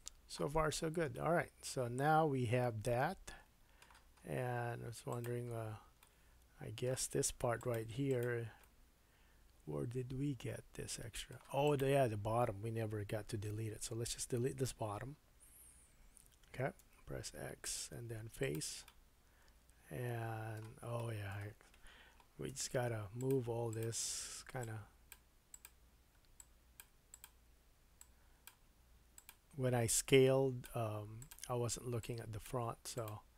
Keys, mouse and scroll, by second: 0.6-1.0 scroll down 3, 4.4 scroll up 2, 4.7 Tab, 5.1 click, 5.2-7.6 middle drag, 5.6 Tab, 7.4 3, 7.6 click, 7.7 middle click, 8.1 click, 8.2-11.6 middle drag, 11.6 click, 16.8 x, 18.8-22.5 middle drag, 22.5 1, 23.2 click, 23.7 click, 24.6-25.6 drag, 26.4 click, 28.0-29.3 drag, 29.3 middle click, 30.1-31.3 drag, 31.3 middle click, 32.0-33.0 drag, 33.0 middle click.